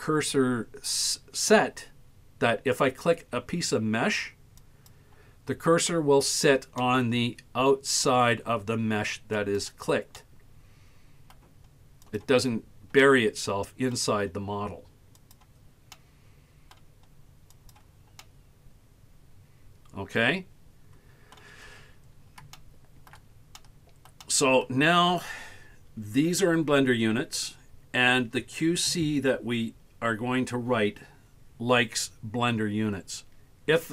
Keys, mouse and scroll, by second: 4.7 click, 6.8-8.4 middle drag, 9.4 click, 10.2-11.4 middle drag, 12.1 click, 13.0 middle click, 15.2 click, 15.9-16.8 middle drag, 17.6 click, 18.2-21.4 middle drag, 22.1 scroll up 3, 22.6 shift+middle click, 23.6 middle click, 24.3 middle click.